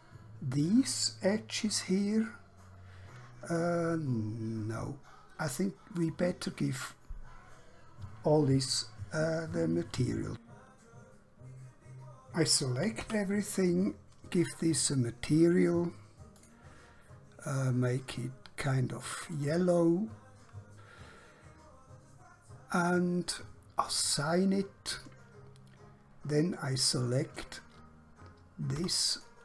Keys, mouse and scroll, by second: 3.6 scroll down 1, 4.2 scroll up 1, 5.0 scroll down 1, 6.1 click, 13.0 a, 16.4 click, 23.8 click, 26.6-28.7 scroll up 1, 28.8 2, 29.2 click.